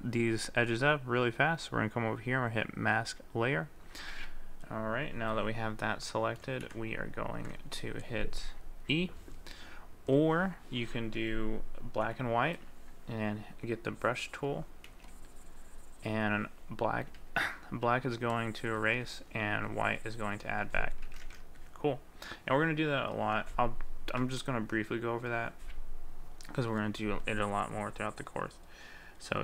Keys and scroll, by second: 17.2 ctrl+z, 21.1 ctrl+z.